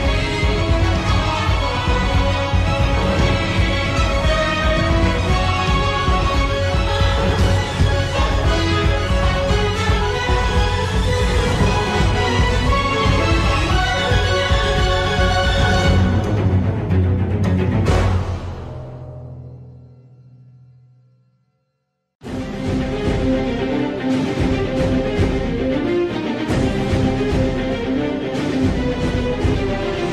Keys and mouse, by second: 0.3 g, 8.5 3, 8.9 middle click, 11.5 click, 12.5 click, 13.3 middle click, 14.5 middle click, 17.4 KP_7, 19.5 s, 23.0 z, 23.8 shift+middle click, 24.8 1, 26.2 click, 29.8 g.